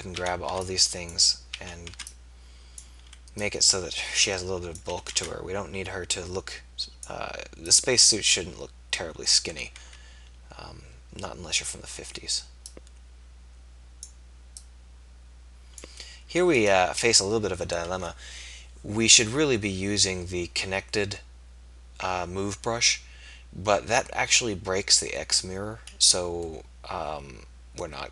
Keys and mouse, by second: 0.1 a, 0.6 b, 1.5 a, 1.9 b, 4.9 a, 5.1 b, 9.7 a, 9.9 b, 14.6-16.6 drag, 27.1-28.1 middle drag.